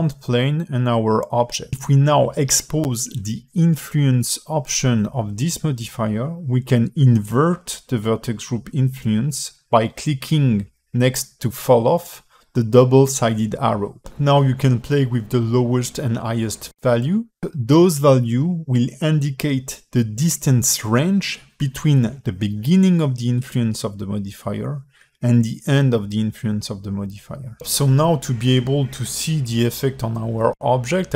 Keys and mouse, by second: 3.5 click, 3.9 click, 9.3 click, 11.5 alt+middle click, 13.2-16.0 shift+drag, 17.0-28.4 shift+drag, 28.9 Tab, 30.8 click.